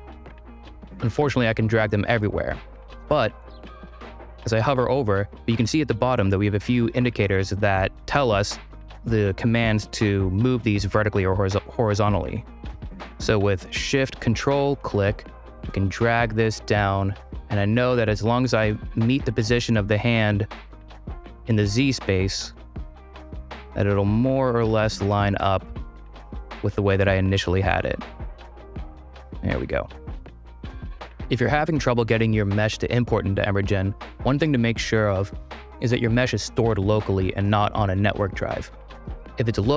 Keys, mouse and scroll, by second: 2.2 ctrl+z, 3.0 click, 14.4-18.1 shift+drag, 19.3-21.1 drag, 22.1-24.6 shift+drag, 26.1 ctrl+r, 26.6 space, 29.3 space.